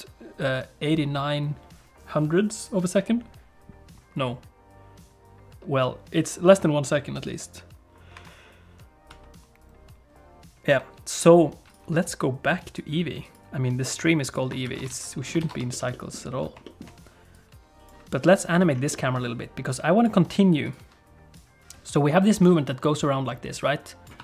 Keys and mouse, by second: 12.0 click, 12.6 click, 14.7 ctrl+s, 14.9 alt+a, 15.4 ctrl+s, 15.7 shift+middle click, 15.9 middle click, 16.7 shift+middle click, 17.4 click, 18.5 click, 18.9 middle click, 19.8 click, 20.7 click, 21.4-24.2 drag.